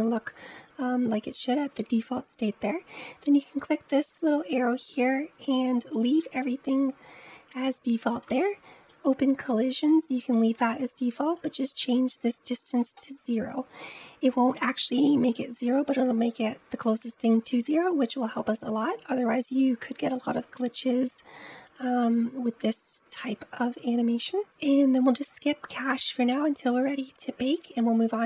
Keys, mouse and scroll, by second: 4.0-7.0 drag, 8.0 click, 8.5-11.1 scroll down 3, 11.1-14.0 drag, 24.3-26.2 scroll down 2, 26.2-27.2 scroll down 9.